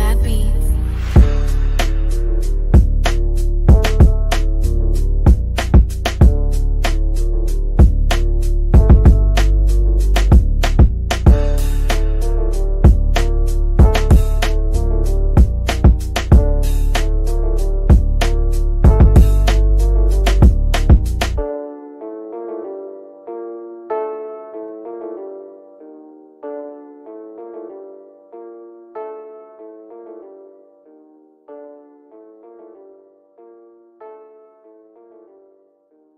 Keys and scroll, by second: 0.1 Down, 11.5 b, 16.7 b, 30.9 F3, 31.4 Escape.